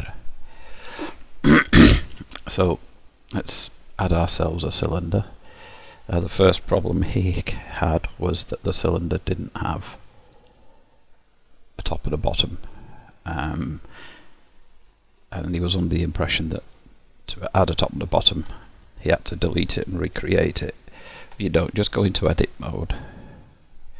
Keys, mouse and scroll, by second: 0.4 click, 0.7 n, 2.1 shift+a, 8.3 click, 9.6 click, 12.4 click, 12.9-13.8 scroll up 1, 13.8 click, 13.8-14.5 scroll up 3, 15.5 middle click, 21.3 Tab.